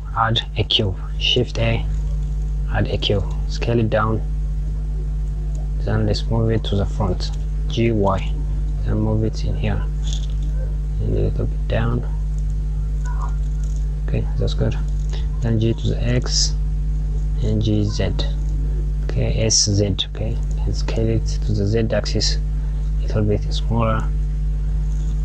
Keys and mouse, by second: 0.7 shift+a, 24.2 click.